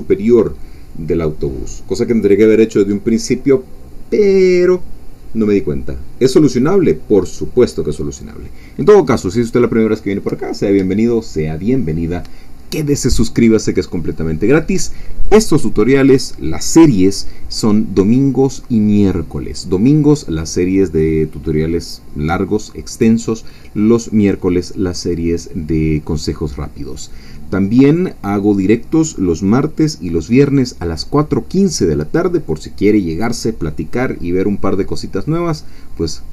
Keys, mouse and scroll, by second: 5.8-7.2 scroll down 1, 7.2-8.5 scroll up 1, 8.5-13.7 scroll up 1, 13.7-36.3 scroll up 1.